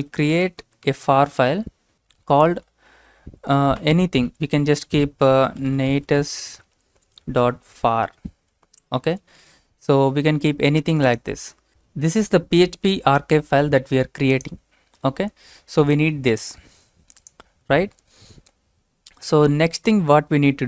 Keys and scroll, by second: 0.0-2.2 typing, 3.8-7.7 typing, 8.8-9.9 typing, 11.4-12.2 typing, 13.4 typing, 14.5 typing, 15.7-16.4 typing, 19.9 Return.